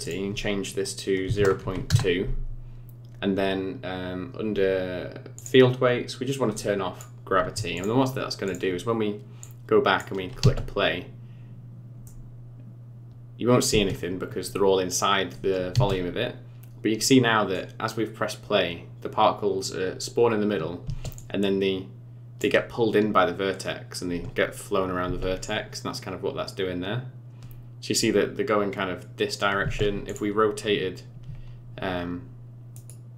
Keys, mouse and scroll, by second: 0.0 click, 2.9-4.2 scroll down 5, 4.2-5.4 scroll down 10, 5.4 click, 6.0-6.5 scroll down 3, 6.5 click, 7.7 click, 8.0-8.5 scroll up 4, 8.5 click, 9.4 click, 10.4 space, 12.1 middle click, 13.7 space, 14.0-15.1 scroll up 6, 15.7 space, 16.6 scroll down 1, 17.0 middle click, 20.9 space, 21.2 click, 25.1 space, 29.7 space, 30.1 click, 32.8 right click.